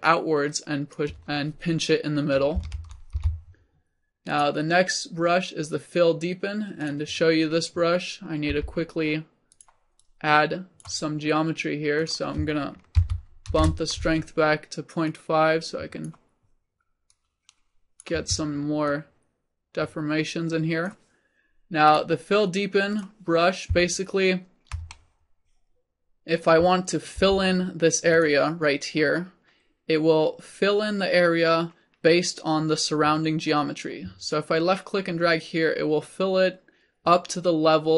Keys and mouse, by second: 3.1 ctrl+z, 3.5 ctrl+z, 4.3-6.2 drag, 8.5 f, 9.6-24.3 drag, 27.3 f, 30.7 click.